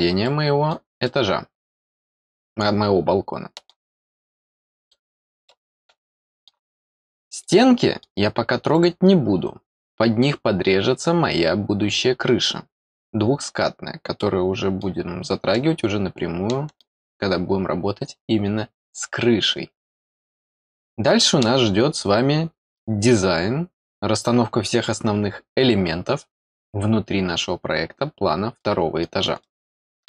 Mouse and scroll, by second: 0.2 middle click, 1.0-3.7 middle drag, 3.9 middle click, 4.9 scroll down 2, 5.4-6.4 middle drag, 6.7 scroll down 2, 7.4 middle click, 8.7 click, 12.0-12.3 scroll down 4, 14.1 middle click, 15.5-16.8 middle drag, 20.1 scroll down 2, 20.6 middle click, 22.4 scroll up 2, 22.7 middle click, 28.5 middle click, 29.4 middle click.